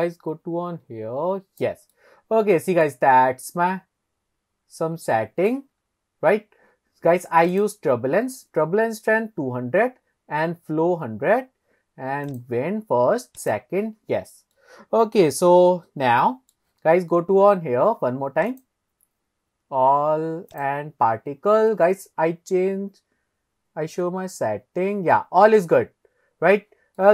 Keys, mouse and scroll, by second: 1.9-2.9 middle drag, 3.1-3.5 scroll up 1, 3.5-5.6 middle drag, 5.8-6.2 scroll up 2, 7.5 click, 12.3 click, 13.4 click, 14.6-16.6 middle drag, 18.5 click, 20.5 click, 21.2-22.0 scroll down 3, 22.1-23.0 scroll down 5, 23.3-23.7 scroll down 2, 24.6-26.0 scroll down 8, 27.0-27.1 middle drag.